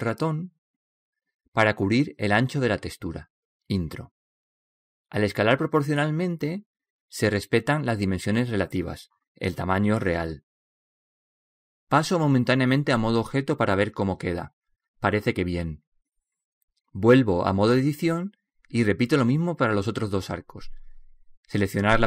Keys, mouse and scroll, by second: 8.3 middle click, 10.4-13.3 middle drag, 14.4 Tab, 14.8-18.3 middle drag, 17.8 Tab.